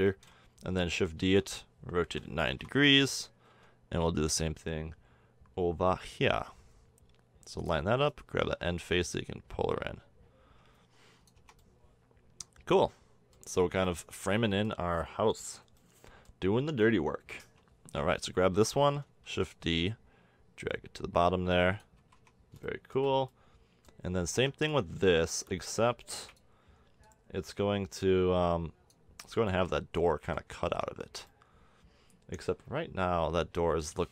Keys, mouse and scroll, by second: 0.2 KP_7, 1.2 shift+d, 2.0 r, 3.5 g, 8.1 click, 8.8-10.6 middle drag, 11.4 Tab, 13.5 middle click, 16.0 middle click, 17.4 Tab, 18.5 l, 19.3 shift+d, 22.0 a, 22.2 Tab, 22.8-23.6 middle drag, 24.3 Tab, 25.3 l, 26.1 shift+d, 30.6 a, 30.7 Tab.